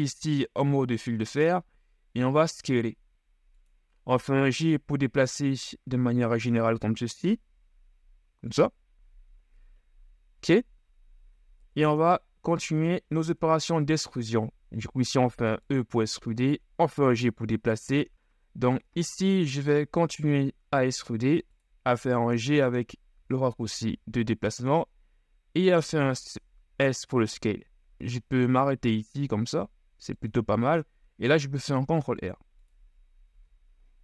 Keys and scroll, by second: 0.7 ctrl+shift+s, 4.6 g, 9.1 z, 11.7 KP_1, 12.4 z, 13.0 shift+z, 14.7 e, 16.2 g, 17.9 s, 20.5 ctrl+shift+e, 22.0 g, 23.2 s, 28.0 s, 31.5 ctrl+r, 33.4 z.